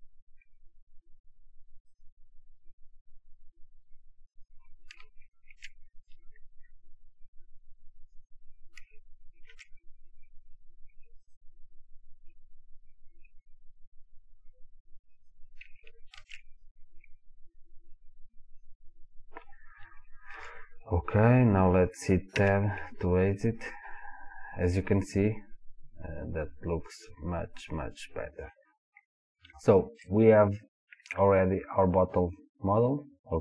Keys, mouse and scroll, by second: 3.6 click, 5.5 ctrl+r, 8.3 click, 9.5 ctrl+r, 15.3 click, 16.2 ctrl+r, 18.8 click, 19.2 scroll down 1, 20.0-23.8 shift+middle drag, 20.7 scroll down 2, 22.7 Tab, 23.3-23.8 scroll down 2, 23.8 click, 25.1-33.4 middle drag, 29.0-29.7 scroll down 2.